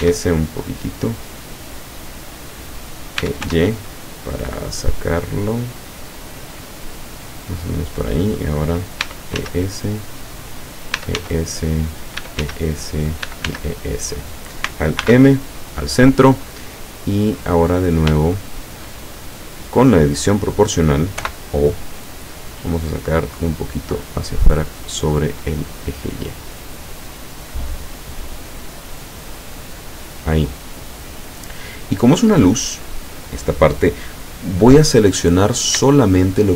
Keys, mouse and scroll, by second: 0.1 s, 1.1 click, 3.2 e, 3.5 y, 7.8 click, 9.0 e, 9.4 s, 10.5 click, 11.0 e, 11.2 s, 12.1 click, 12.3 e, 12.5 s, 13.2 click, 13.3 e, 14.3 click, 15.0 alt+m, 15.7 click, 16.8 middle click, 17.7 scroll down 1, 18.3 shift+middle click, 19.2-19.8 shift+scroll up 1, 21.3 o, 23.1 click, 24.3-26.5 scroll up 6, 27.6 scroll down 1, 28.3 scroll down 1, 34.5 middle click, 35.5-35.8 scroll down 1, 36.0 shift+middle click.